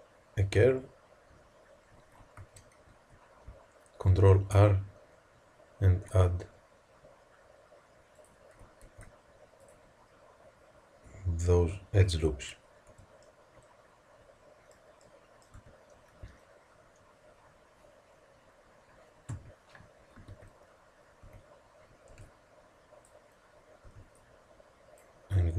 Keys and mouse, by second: 2.3 z, 4.0 ctrl+r, 8.8 ctrl+r, 12.8 Tab, 15.5 Tab, 19.2 KP_3, 20.2 z, 21.1 a, 22.0 b, 23.7 b.